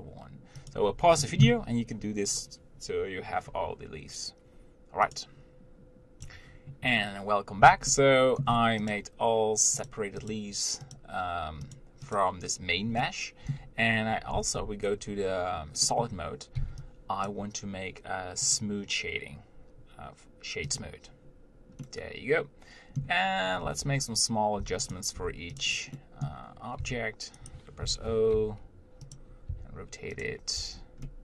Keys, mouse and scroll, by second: 8.4 shift+middle click, 9.2 click, 10.1 click, 11.2 click, 12.0 click, 13.2-14.8 middle drag, 14.8 z, 16.1-17.5 middle drag, 17.5 b, 21.0-22.1 drag, 22.1-23.6 middle drag, 23.6-23.9 scroll up 2, 23.9 Tab, 24.9 Tab, 25.2 click, 25.4 Tab, 25.8 click, 26.2 middle click, 27.0 g, 28.6 o, 29.3 g, 29.7 r, 30.8 Tab.